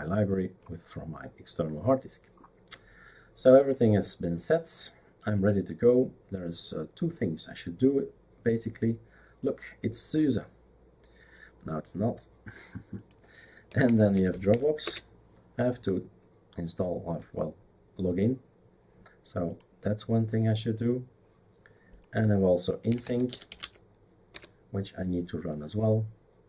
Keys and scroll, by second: 13.4-15.0 typing, 22.6-24.1 typing, 24.3 Return.